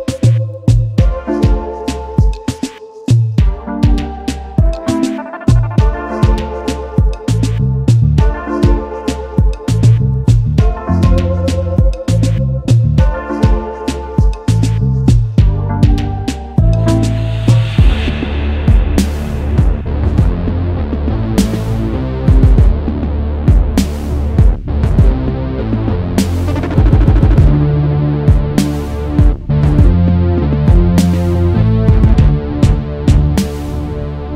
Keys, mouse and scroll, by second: 0.5 alt+scroll down 1, 0.7 space, 1.2 scroll down 1, 2.7 right click, 3.3 right click, 3.6 shift+click, 6.1 space, 6.2 double click, 6.6 space, 6.8 space, 7.7 right click, 8.7 double click, 9.0 alt+scroll up 1, 10.4-12.9 scroll up 1, 26.0-28.0 typing, 27.8 double click, 29.0 typing, 30.1 typing, 31.1 typing, 32.5-33.2 typing.